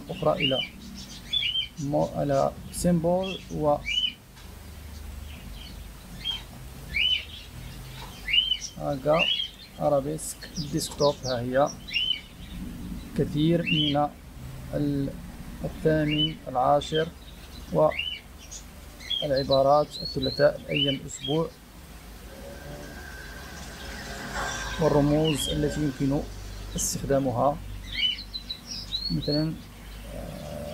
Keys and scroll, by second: 7.8-9.1 typing.